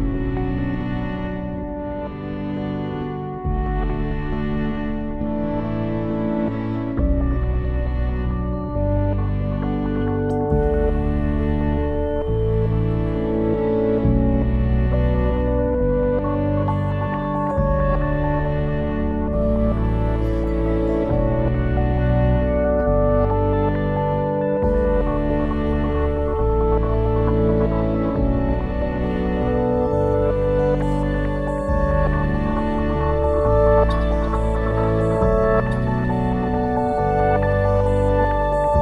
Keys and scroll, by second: 19.5 ctrl+s.